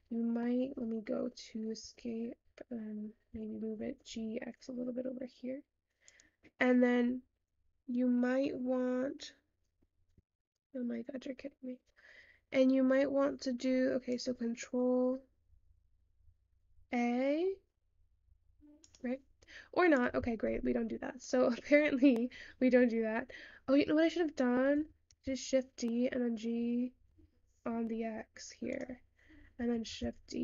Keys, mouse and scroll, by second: 0.2-1.9 middle drag, 1.9 `, 3.9 g, 28.0 shift+d.